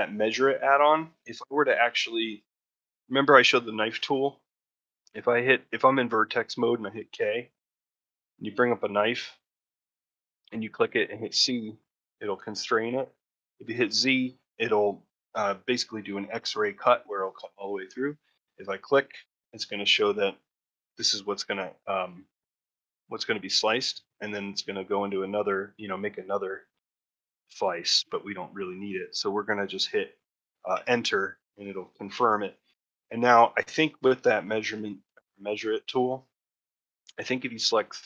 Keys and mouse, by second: 31.8 middle click, 32.4-33.6 middle drag, 34.0 middle click, 37.5 shift+click.